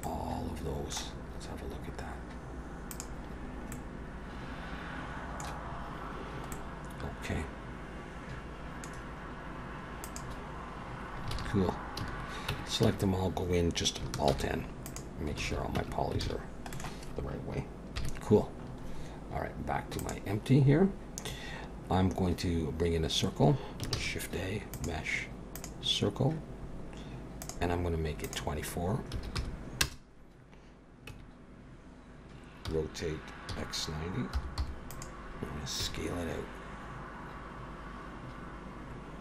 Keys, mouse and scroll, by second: 0.0 middle click, 2.9 click, 3.7 middle click, 5.7-6.5 scroll up 3, 6.5 middle click, 8.9-9.6 scroll down 1, 9.6-10.0 scroll down 3, 10.0 click, 11.3 alt+a, 12.0 a, 12.5 Tab, 12.8 a, 14.3 alt+n, 15.4 alt+a, 15.8 Tab, 16.2 alt+a, 16.7 middle click, 18.0 KP_1, 18.6-19.3 scroll up 4, 20.0 click, 23.9 shift+a, 27.4 click, 28.2 click, 31.1 Tab, 32.6 r, 35.8 s.